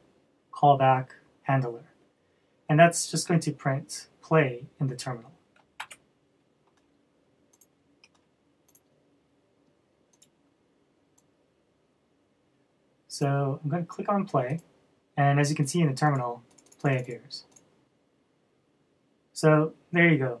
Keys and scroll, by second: 6.4 super+s, 8.4 super+s.